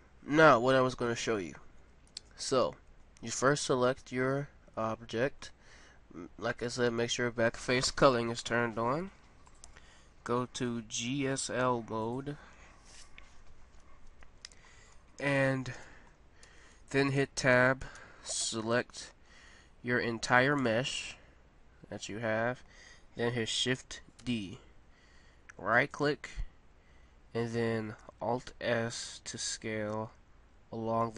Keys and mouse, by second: 2.3-4.0 middle drag, 9.4-11.4 middle drag, 15.2-16.9 middle drag, 16.4 Tab, 17.9 a, 18.3 a, 19.7-22.9 middle drag, 24.3 shift+d, 28.6 alt+s.